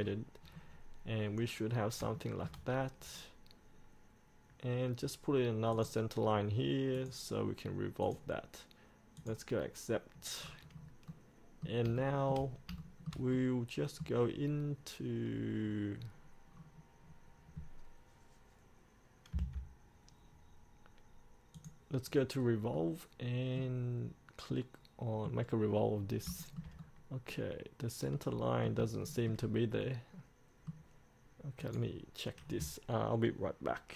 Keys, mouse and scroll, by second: 0.2-2.2 scroll up 1, 2.3 shift+middle click, 5.9 click, 10.5-11.2 scroll up 1, 11.2 middle click, 12.1 shift+middle click, 12.9 shift+middle click, 14.7 scroll down 1, 16.2-16.6 scroll up 1, 16.6-17.2 scroll down 1, 17.2-19.4 scroll up 1, 19.4 F8, 21.7 click, 22.9-25.7 middle drag, 25.7-26.1 scroll down 1, 26.1 scroll up 1, 26.6-28.9 shift+middle drag, 29.2-31.4 shift+middle drag, 31.8 click.